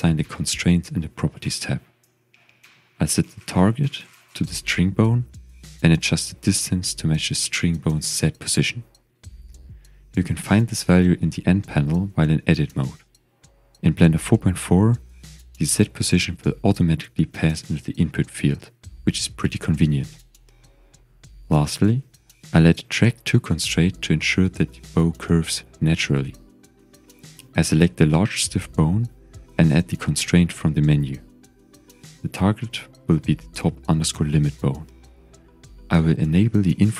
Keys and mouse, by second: 0.0-3.2 drag, 3.9-5.0 drag, 6.2-8.3 drag, 10.8 Tab, 12.9 click, 14.1 click, 15.2 Tab, 16.3 click, 19.3 ctrl+s, 20.2-20.6 shift+drag, 21.5 click, 22.0 click, 23.9-24.9 drag, 26.0-26.3 shift+drag, 30.7-32.0 drag, 33.3-36.9 drag.